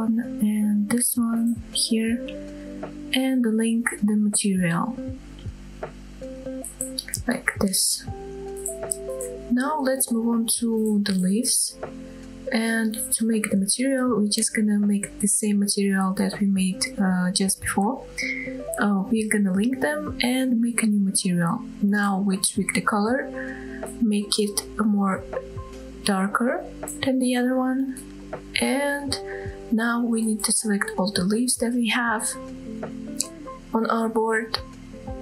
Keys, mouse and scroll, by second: 0.3 shift+middle drag, 0.7-1.1 middle drag, 1.3-1.9 shift+scroll up 3, 2.0 shift+middle drag, 2.9 shift+click, 6.1 ctrl+l, 8.5-8.8 scroll up 2, 12.1-12.5 scroll down 2, 13.3 scroll down 1, 13.9 middle click, 14.8 click, 15.4 click, 16.1 shift+click, 17.1 ctrl+l, 18.9 click, 20.1 click, 20.8-21.1 drag, 30.8-31.4 scroll up 1, 31.4 click, 32.8 shift+middle drag, 33.2-33.6 middle drag, 34.1-34.7 shift+drag, 34.9 scroll down 1.